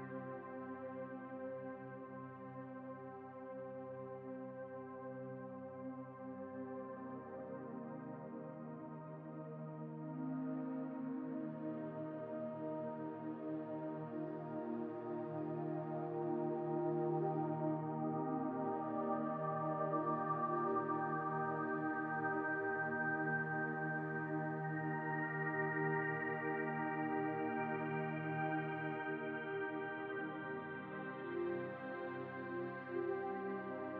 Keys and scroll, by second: 0.0 Return, 18.5-21.8 typing.